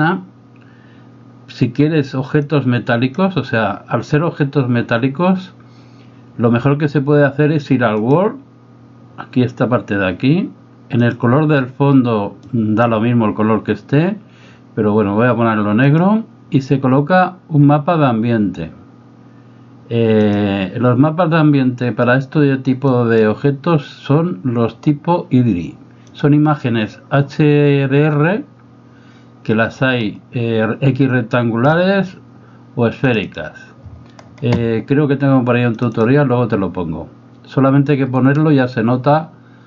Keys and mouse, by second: 2.5 click, 10.9 click, 16.0-20.4 drag, 23.0 click.